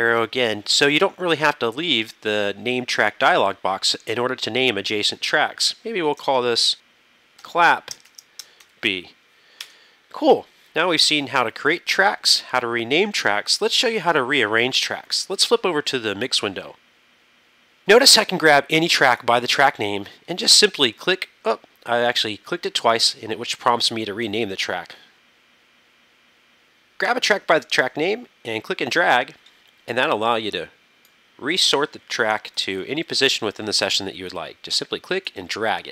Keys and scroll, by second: 6.3-8.7 typing, 9.7 Home, 16.0 super+=, 32.6 super+=.